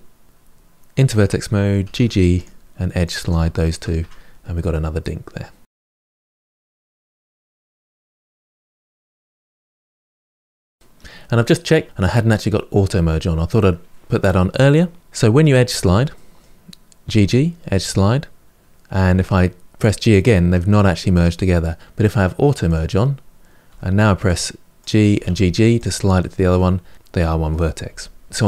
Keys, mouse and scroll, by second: 0.3-0.6 scroll up 1, 0.6 1, 1.0 click, 1.7 g, 2.9 click, 3.1 g, 3.8 Tab, 4.1-4.5 scroll down 5, 4.5-5.9 middle drag, 5.9 scroll up 3, 6.0 shift+middle click, 6.1 Tab, 6.2 middle click, 6.4 click, 6.5 middle click, 6.6 scroll up 1, 6.7 shift+click, 6.9 ctrl+b, 7.3 g, 7.7 Tab, 7.7 middle click, 7.9 Tab, 8.1 middle click, 8.6 click, 8.8 g, 9.1 click, 9.1 middle click, 9.2 g, 9.5 middle click, 10.0 click, 10.2 click, 10.5-11.6 middle drag, 11.9 click, 15.0 middle click, 15.5-16.0 scroll up 2, 16.0 middle click, 16.9 g, 18.9 g, 22.5 click, 23.5 g, 25.0 g, 26.3 g, 26.9 middle click, 27.7 g, 28.3-28.4 scroll down 2.